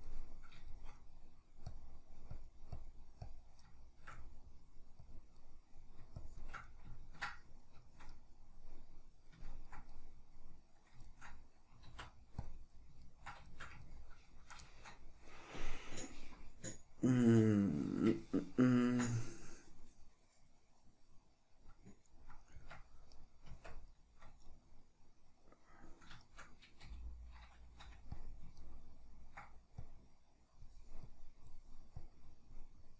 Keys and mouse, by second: 1.7-3.8 drag, 3.8-5.1 shift+middle drag, 5.1 click, 5.4 middle click, 6.3 shift+click, 6.7-23.2 middle drag, 11.9 alt+q, 22.6 Tab, 23.2 right click, 23.5 Tab, 26.4-28.4 shift+middle drag, 27.0 g, 28.4 click, 28.8-29.9 ctrl+middle drag, 29.9-32.9 drag.